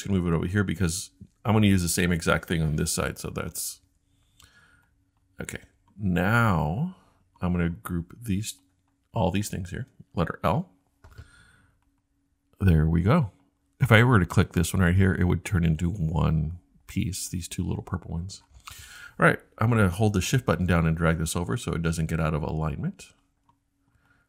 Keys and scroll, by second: 0.0-2.2 typing.